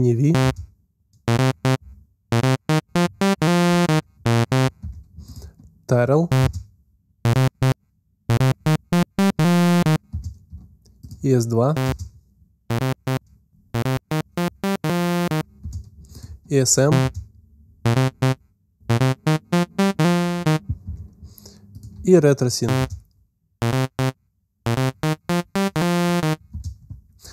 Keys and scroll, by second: 0.3 alt+space, 4.6 space, 6.3 space, 9.9 space, 11.7 alt+space, 15.4 space, 16.8 alt+space, 20.6 space, 22.6 alt+space, 26.3 space.